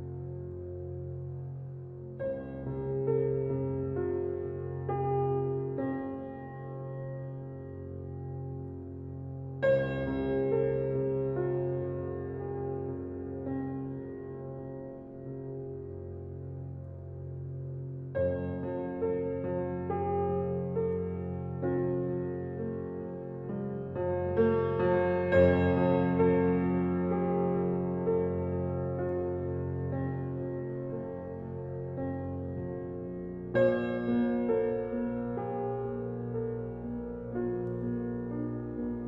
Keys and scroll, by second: 27.6 [.